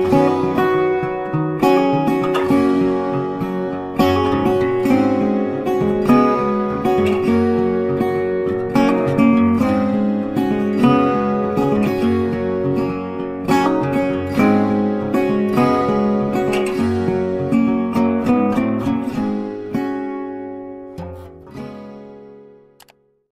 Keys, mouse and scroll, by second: 2.5 Return, 3.5 ctrl+space, 3.6 ctrl+click, 3.8 ctrl+space, 7.1 Return, 7.7 space, 7.8 double click, 9.1 ctrl+click, 9.3 ctrl+click, 13.5 Return, 15.7 double click, 15.8 ctrl+space, 15.9 ctrl+click, 16.1 ctrl+space, 17.6 right click, 19.4 space, 19.6 ctrl+click, 20.1 ctrl+click, 20.3 ctrl+0.